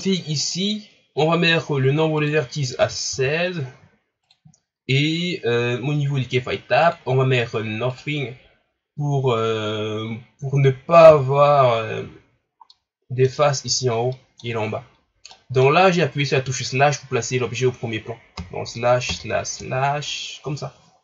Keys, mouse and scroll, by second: 0.4-4.3 drag, 6.8-9.8 drag, 11.1 KP_Divide, 12.1 scroll down 3, 12.7-18.4 middle drag, 18.4 KP_Divide, 19.1 KP_Divide, 19.6 KP_Divide.